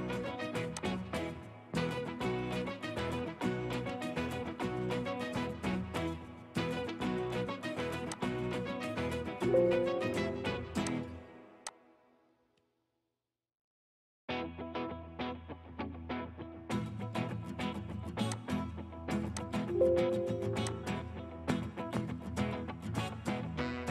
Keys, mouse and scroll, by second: 3.1 middle click, 4.1-4.4 scroll down 1, 4.4 middle click, 6.7 right click, 22.9 scroll down 1.